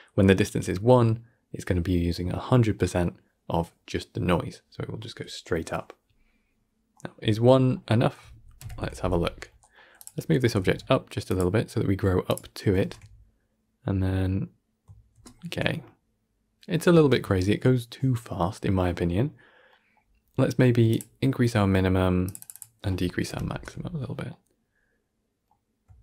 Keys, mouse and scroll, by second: 2.6-5.8 middle drag, 6.8 middle click, 7.3 scroll up 2, 7.6-8.5 middle drag, 8.5 shift+Left, 9.5-9.9 middle drag, 9.9 click, 10.2 middle click, 10.3 g, 11.4-11.8 middle drag, 11.8-12.1 scroll up 2, 12.1 click, 12.7 shift+space, 15.0 shift+space, 15.2-20.0 shift+middle drag, 20.0-20.8 scroll up 1, 20.8-21.4 drag, 21.4-22.1 middle drag, 22.1-23.2 drag, 23.2 shift+Left, 23.4 shift+space, 24.2-26.0 middle drag.